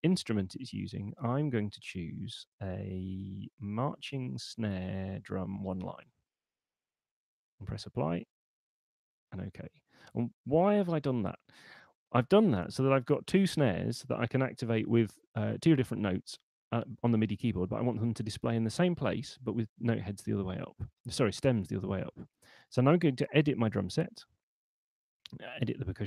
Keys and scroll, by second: 10.9 super+2.